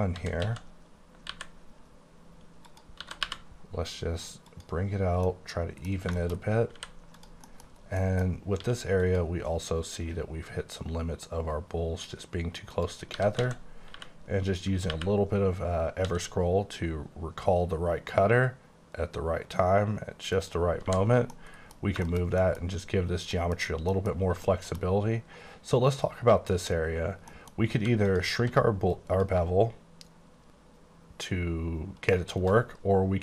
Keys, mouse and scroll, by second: 0.0-1.3 typing, 2.7 click, 3.1 typing, 4.6 click, 5.0 scroll down 2, 5.4 middle click, 6.5 scroll up 1, 6.8 h, 7.1 click, 7.5 middle click, 7.7 scroll up 2, 8.0 middle click, 8.6 q, 9.0 click, 9.5-10.8 scroll down 8, 11.2-11.7 scroll up 2, 11.9-12.3 scroll down 2, 12.3-12.8 scroll up 1, 12.8 click, 13.2-15.0 typing, 16.0 x, 20.4 click, 20.8-21.3 scroll down 4, 20.9 h, 21.3 scroll up 1, 21.4 middle click, 21.7-22.5 scroll down 4, 22.1 shift+middle click, 22.5 middle click, 23.4 middle click, 23.6-24.3 scroll up 5, 23.9 middle click, 24.4 shift+middle click, 24.9 scroll up 1, 26.3 scroll down 2, 26.5 middle click, 27.3 middle click, 28.0 click, 28.4 q, 29.0 click, 32.5 right click.